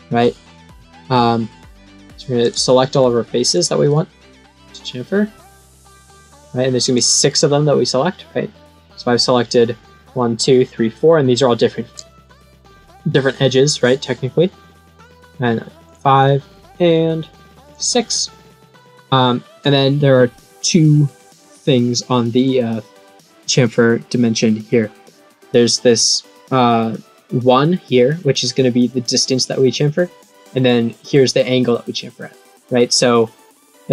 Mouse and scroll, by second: 2.4 click, 3.5 click, 6.2 click, 6.9 click, 15.8 click, 17.6 click, 22.3 click.